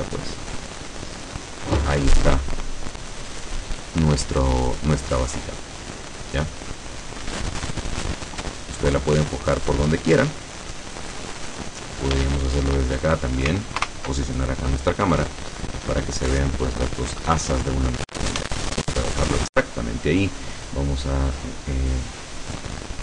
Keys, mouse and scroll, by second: 0.1-0.8 middle drag, 1.0 scroll up 1, 6.1 scroll down 1, 6.7 click, 7.3 Escape, 7.8-11.0 drag, 11.7-12.9 drag, 13.0 shift+scroll down 2, 13.8 ctrl+alt+KP_0, 18.4 ctrl+s, 18.8 ctrl+click.